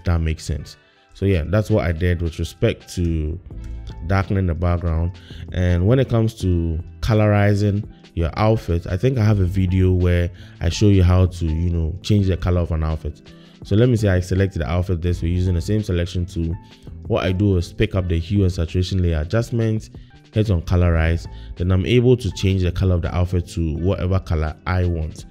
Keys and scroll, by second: 2.6 BackSpace, 3.0 BackSpace, 3.6 BackSpace.